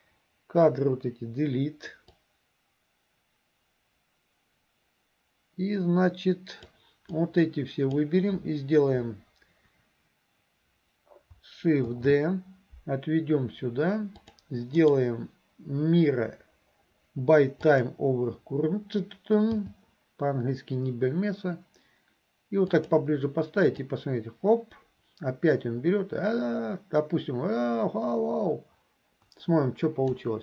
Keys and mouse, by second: 0.7 Delete, 2.2-6.9 drag, 7.1 click, 12.0 shift+d, 14.9-18.0 drag, 24.0-30.3 drag.